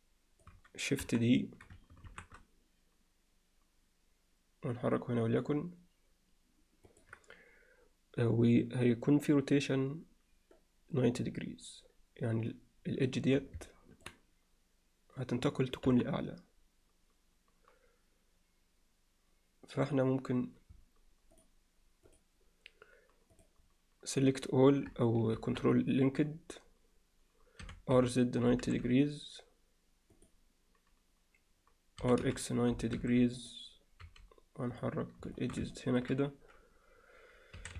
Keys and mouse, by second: 1.0 KP_1, 2.1 shift+d, 13.7 alt+middle click, 15.9 KP_1, 23.4 click, 25.4 ctrl+l, 27.6 r, 32.0 r, 34.0 g, 35.4 alt+shift+middle click, 35.8 ctrl+alt+middle click.